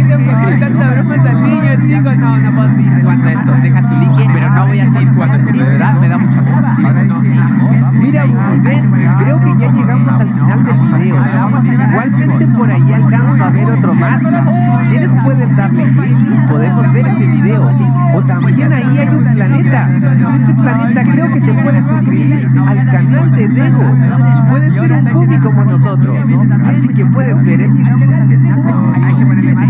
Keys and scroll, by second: 27.6 space.